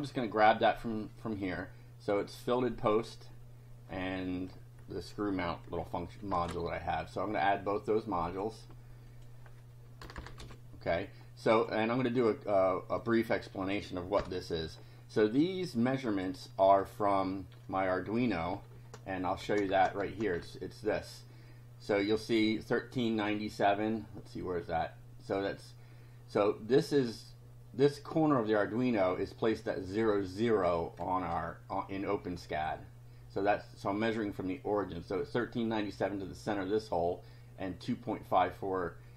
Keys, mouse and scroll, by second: 2.6-4.7 drag, 6.3 ctrl+c, 8.3 click, 9.1 click, 10.1 Return, 10.4 ctrl+v, 11.5 click, 12.1 scroll up 2, 13.1 click, 14.2 BackSpace, 15.9-17.0 drag, 18.8 alt+Tab.